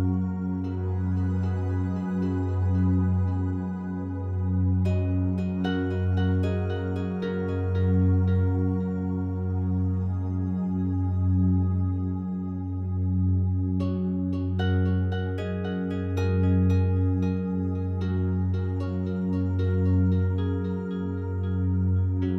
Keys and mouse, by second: 0.7-3.8 drag, 4.4-5.4 alt+drag, 6.8 typing, 8.7-11.0 drag, 10.3 ctrl+z, 11.2-12.4 drag, 12.5 ctrl+z, 13.1-14.3 drag, 15.2 ctrl+z, 16.1 click, 16.9 alt+click, 17.3 ctrl+alt+click, 18.0 ctrl+alt+shift+click, 18.4 alt+click, 20.2 alt+click, 21.3-22.3 alt+drag.